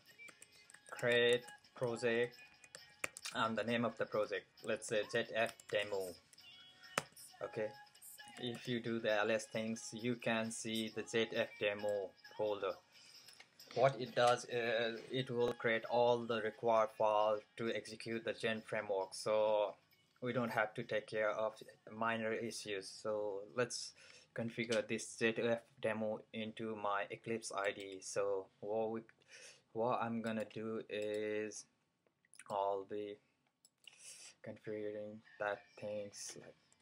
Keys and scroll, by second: 0.0-6.4 typing, 8.0-8.7 typing, 36.6-36.8 typing.